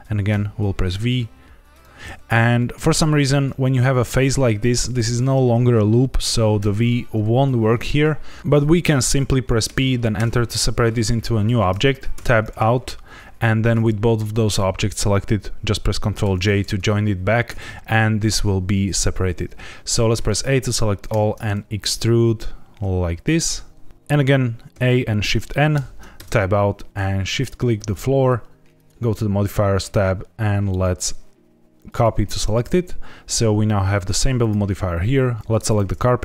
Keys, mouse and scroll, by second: 0.2 v, 1.7 right click, 4.1 alt+click, 6.5 v, 9.6 p, 12.1 Tab, 16.2 ctrl+j, 17.4 Tab, 20.1 a, 21.0 e, 23.9 Tab, 24.6 a, 25.7 shift+n, 26.1 Tab, 27.3 shift+click, 28.7 click, 30.6 click, 33.6-34.3 scroll up 1, 34.3 click, 35.4 ctrl+z, 35.6 click.